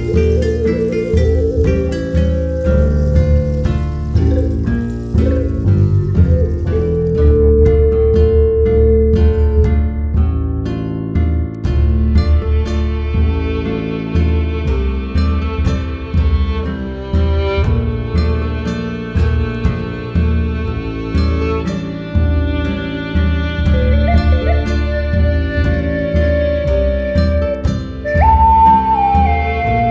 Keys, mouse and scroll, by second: 0.1 click, 0.8 middle click, 1.4 click, 1.9-3.0 drag, 3.4-4.1 middle drag, 4.1-6.5 drag, 6.5-7.4 middle drag, 7.8 middle click, 8.1-8.5 scroll down 12, 8.5 click, 9.4-9.7 scroll up 8, 9.7 middle click, 10.2 drag, 10.7-13.0 drag, 13.3 shift+a, 15.2-16.2 drag, 16.3-19.1 drag, 18.1 KP_0, 19.3 KP_Enter, 21.0-21.4 middle drag, 21.4-24.3 drag, 24.4 click, 24.9-26.3 drag, 26.6-27.7 drag, 27.7-28.5 scroll down 12, 28.5-29.9 drag.